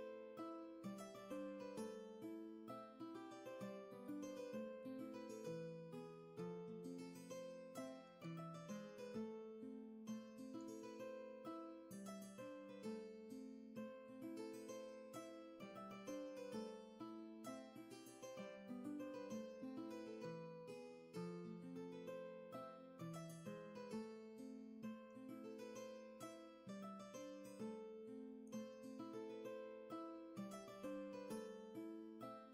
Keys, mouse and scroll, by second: 12.2 ctrl+z, 31.9 ctrl+z.